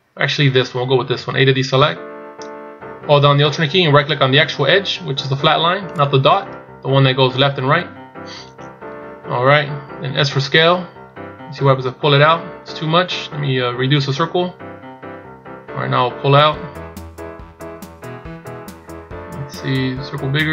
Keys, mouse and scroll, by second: 6.0 alt+right click.